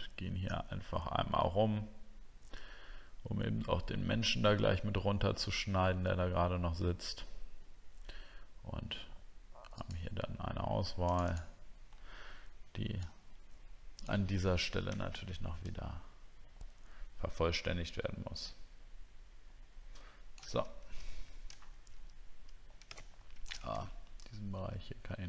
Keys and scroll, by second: 21.6 alt+scroll up 1.